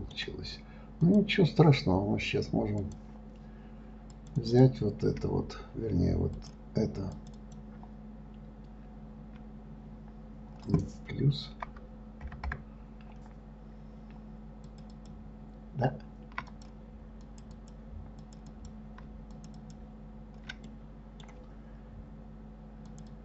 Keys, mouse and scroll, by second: 1.4 click, 3.2-4.6 drag, 4.8 click, 6.7 click, 7.5 click, 7.7 click, 12.0 shift+KP_Add, 12.6 shift+KP_Add, 15.0 shift+click, 15.3 shift+click, 16.9 click, 17.6 click, 17.9 click, 18.6 click, 18.9 click, 19.7 shift+click, 19.9 shift+click, 21.1-23.2 middle drag.